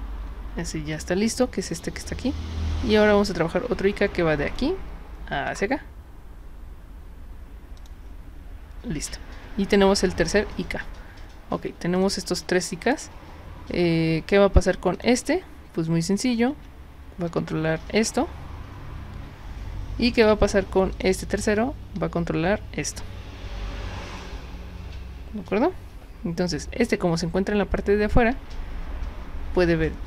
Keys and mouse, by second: 0.9 click, 3.2 click, 4.5 click, 5.5 click, 7.8 click, 11.9 click, 12.3 click, 14.9 click, 16.5 w, 20.9 click.